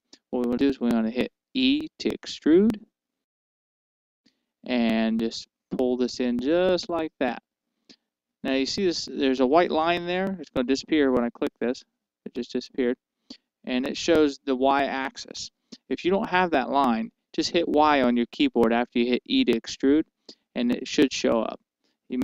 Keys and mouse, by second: 3.3 e, 12.4-14.2 drag.